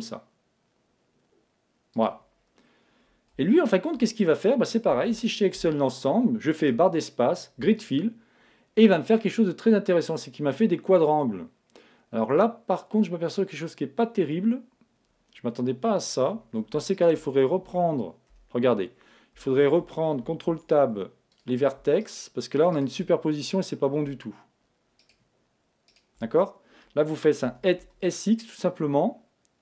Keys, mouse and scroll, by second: 2.1-3.7 drag, 2.4-6.5 middle drag, 4.9 a, 6.6 space, 8.4-8.8 scroll down 1, 8.8 middle click, 8.8-9.4 scroll up 1, 9.4-10.1 scroll up 1, 10.1-10.7 scroll up 1, 10.7 scroll up 1, 10.9 middle click, 16.9-19.7 right drag, 18.3 a, 20.5 ctrl+Tab, 25.0-28.8 right drag, 27.4 s.